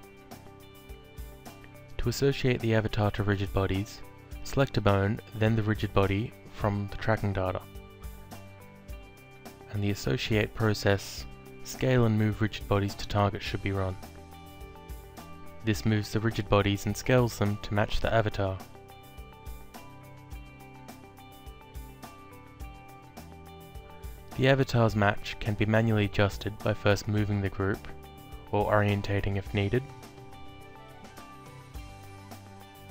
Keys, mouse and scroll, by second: 2.1 click, 5.4 click, 7.9 ctrl+click, 12.1 click, 14.2 click, 15.6 alt+click, 19.9 click, 20.8 alt+middle click, 21.9 alt+click, 23.5 click, 25.0 w, 25.8 click, 27.7 alt+click, 29.8 click, 31.2 alt+click.